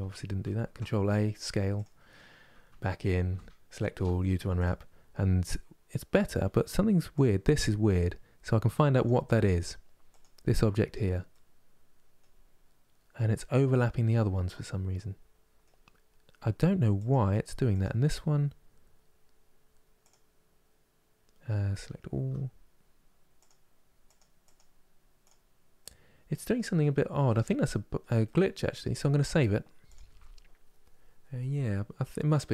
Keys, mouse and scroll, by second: 1.5 ctrl+a, 2.4 Tab, 3.0 a, 4.3 u, 6.9 click, 9.9 click, 11.0-16.7 middle drag, 16.7 click, 17.5 click, 21.9 a, 23.1 click, 23.8 click, 24.2 click, 24.9 click, 25.5-32.1 middle drag, 32.1-32.5 drag.